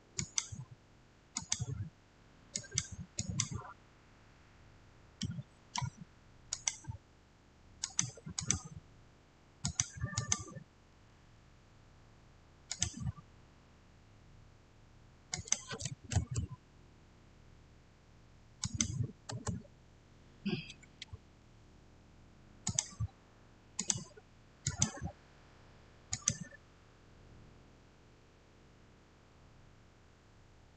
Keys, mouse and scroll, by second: 5.1-6.4 middle drag, 6.4 click, 12.6 click, 15.2 click, 16.0 Return, 18.5 Return, 18.5 click, 19.2 Return, 22.5 Return, 22.5 click.